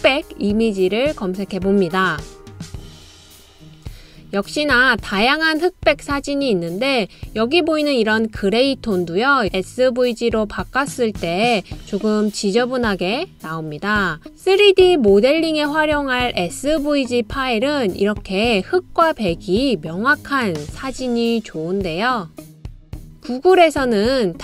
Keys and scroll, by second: 7.2 typing, 15.4 typing, 17.4 typing.